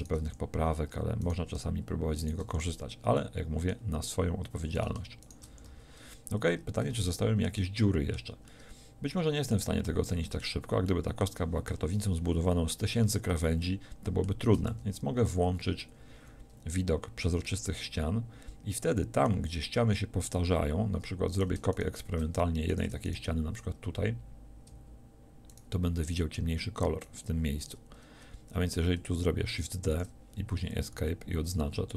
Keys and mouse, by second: 0.2 f, 2.5 f, 5.5 f, 5.6 a, 14.7 z, 29.9 shift+d, 30.9 a.